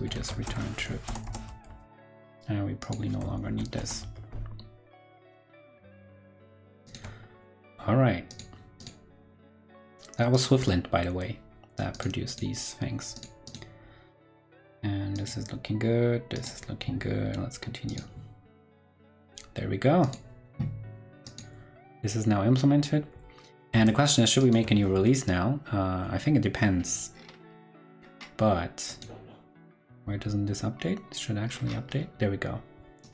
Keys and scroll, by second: 0.1 shift+super+Left, 0.7 super+Right, 1.6 super+s, 3.4 shift+super+Right, 3.9 super+s, 5.7 super+Tab, 7.1 super+Tab, 23.7 super+Tab, 24.7 super+Tab, 29.7 super+r.